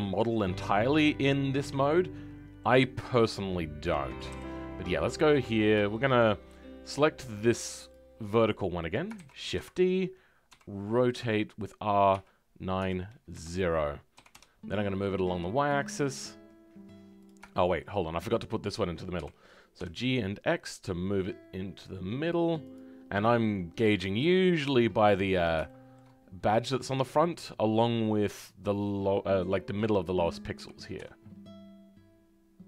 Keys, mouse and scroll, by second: 5.9-7.8 shift+middle drag, 7.8 click, 17.5 shift+middle click, 18.2-19.2 scroll up 1, 25.6 shift+middle click, 26.2 scroll up 1.